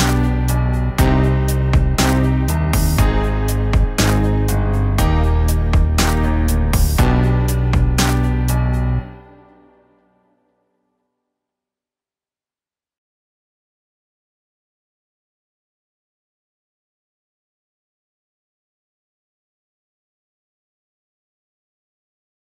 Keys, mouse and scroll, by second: 0.1 middle click, 1.9 middle click, 2.4 middle click, 2.8 middle click, 4.0 middle click, 5.6 middle click, 6.5 middle click, 7.0 middle click, 9.1 middle click, 9.6 middle click, 10.1 middle click, 10.7 middle click, 11.1 middle click, 11.7 middle click, 12.0 middle click, 12.3 middle click, 13.0 middle click, 13.7 middle click, 17.6 middle click, 18.3 middle click, 18.8 middle click, 19.9 middle click, 20.6 middle click.